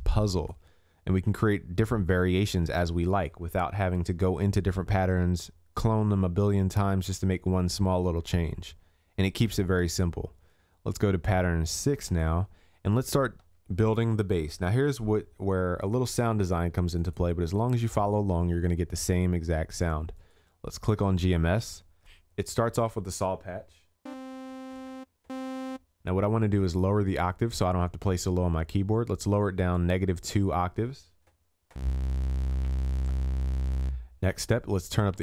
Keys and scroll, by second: 8.2 ctrl+s.